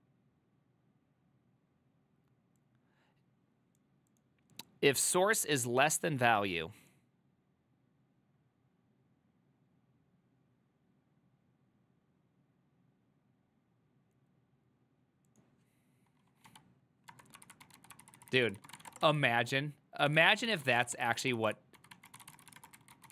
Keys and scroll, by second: 17.5-23.1 typing, 21.5 ctrl+c.